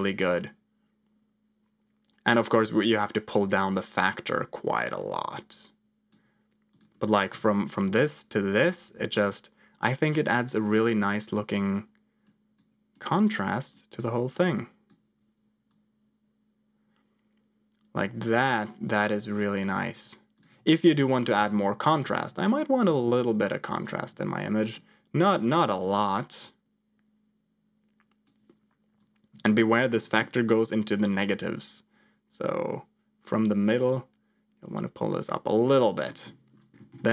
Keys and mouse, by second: 6.6 click, 7.3 m, 7.8 m, 8.5 m, 8.8 m, 10.4 click, 12.3 click, 13.0 click, 13.8 click, 14.4 click, 15.2 m, 15.7-19.7 drag, 20.2 click, 20.9-24.0 typing, 24.6 click, 25.8-28.3 drag, 28.9 click, 29.7 middle click, 30.4-35.3 drag, 36.0 middle click, 36.6 click, 36.7 F2, 36.7 middle click.